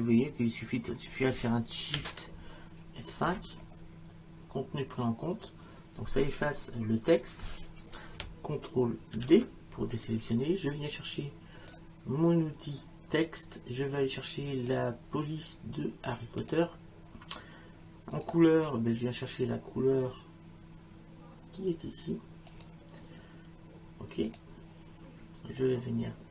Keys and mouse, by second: 3.3 shift+F5, 5.0 click, 9.2 ctrl+d, 11.7 click, 14.7 click, 16.4 click, 18.1 click, 22.5 click, 24.3 click, 25.6 click.